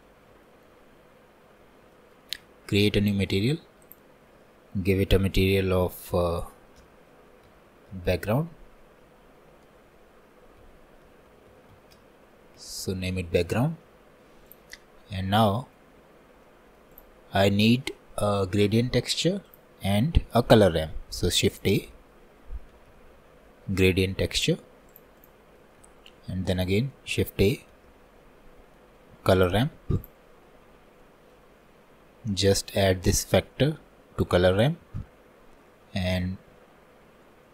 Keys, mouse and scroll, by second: 0.5 shift+middle click, 0.9-1.5 scroll up 1, 1.5-2.0 scroll down 1, 2.0-3.1 shift+middle drag, 3.1-15.0 drag, 34.3 click.